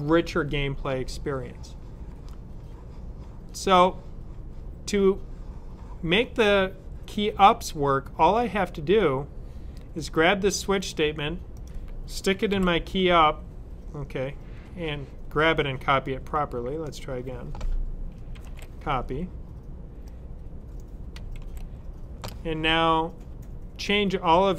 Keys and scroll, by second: 12.4 super+v, 18.2 super+c.